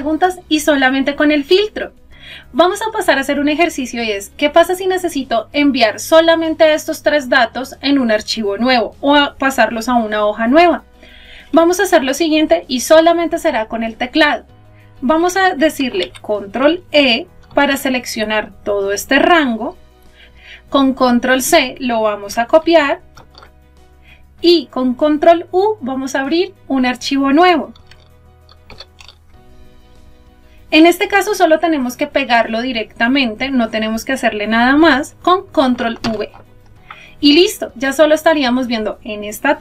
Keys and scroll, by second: 17.4 ctrl+e, 21.5 ctrl+c, 25.7 ctrl+u, 34.5 ctrl+v.